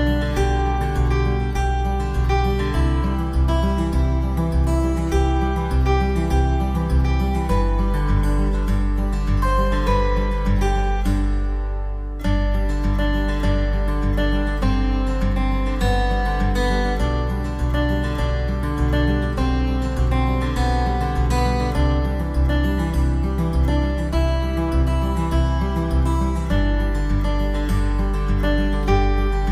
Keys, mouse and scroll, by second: 0.6 shift+a, 4.4 click, 5.2 click, 8.3 right click, 9.1 right click, 10.0 click, 12.5 click, 13.3 click, 14.3 click, 15.5 s, 20.8 middle click, 22.9 Tab, 24.1 click, 25.1 right click, 25.6 middle click, 27.6 shift+right click, 29.1 i.